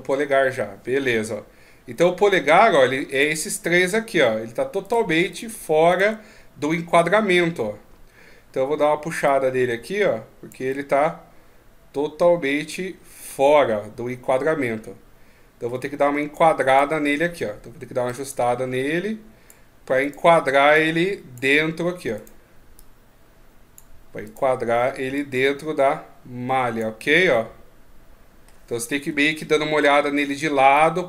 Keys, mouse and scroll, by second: 1.0 KP_3, 2.9 shift+right click, 3.6 middle click, 4.6 right click, 5.1 shift+right click, 7.1 KP_3, 9.0 click, 10.5 middle click, 16.4 right click, 17.8 click, 19.8 right click, 20.5 click, 21.9 right click, 22.5 click, 24.0 right click, 24.9 click, 26.8 middle click, 28.9 KP_1, 30.5 click.